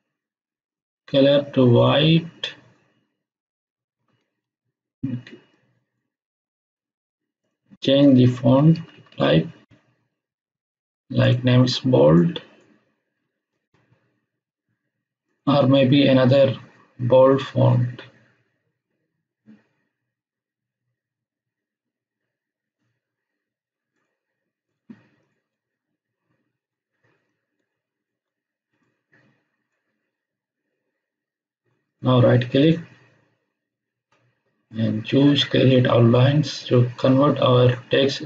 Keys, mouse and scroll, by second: 5.5-6.1 drag, 8.1 Down, 8.9 Down, 9.6 Up, 11.2 click, 13.2 space, 15.2 click, 23.9 click, 27.2-28.2 alt+shift+drag, 31.8 right click.